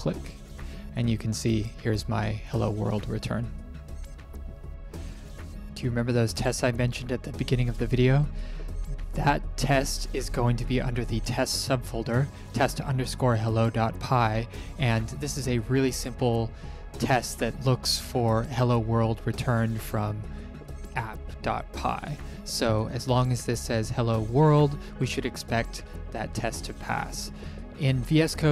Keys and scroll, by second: 5.8 Print, 27.8 ctrl+shift+p.